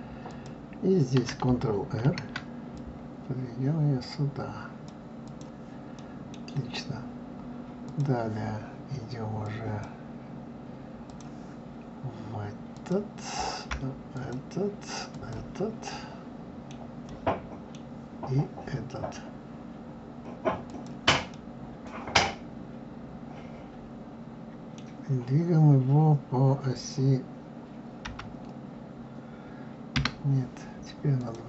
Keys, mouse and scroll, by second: 0.3 click, 2.0 ctrl+r, 4.5 click, 5.2 click, 6.0-7.8 middle drag, 7.8 click, 9.4 click, 11.1 click, 12.7 click, 14.1 shift+click, 15.1 shift+click, 15.9-20.1 middle drag, 20.6 shift+click, 21.3-24.4 middle drag, 28.0 g, 31.2 click.